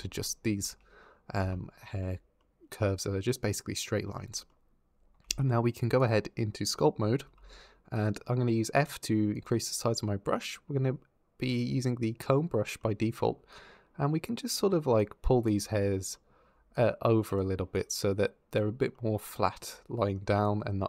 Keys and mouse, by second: 0.4 Tab, 1.2 Tab, 1.7 Tab, 5.0 ctrl+Tab, 7.0 f, 9.2 click, 14.8 click.